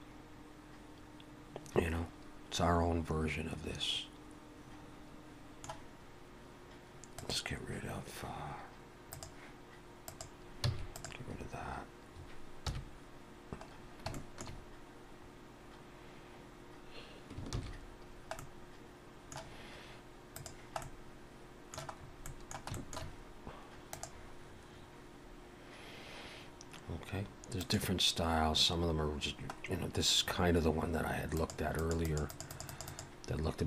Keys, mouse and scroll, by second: 7.1 click, 9.1 click, 10.7 click, 10.7 x, 12.6 KP_1, 14.0 scroll down 1, 14.2 shift+middle click, 16.0-16.3 scroll up 1, 17.6 ctrl+s, 18.0 scroll down 1, 18.4 middle click, 20.4 click, 20.8 middle click, 22.0-22.5 scroll up 2, 22.3 middle click, 22.7 shift+middle click.